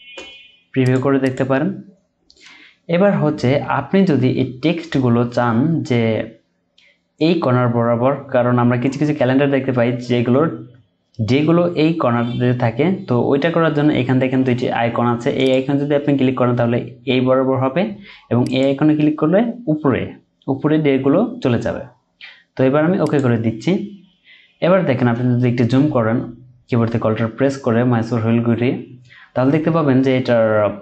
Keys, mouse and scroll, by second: 1.2 double click, 25.9-26.4 alt+scroll up 1, 27.1-30.2 scroll down 1.